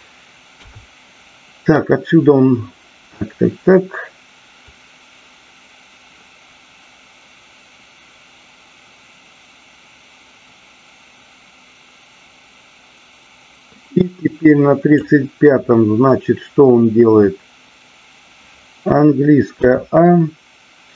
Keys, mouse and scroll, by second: 0.5 KP_3, 4.6-15.1 drag.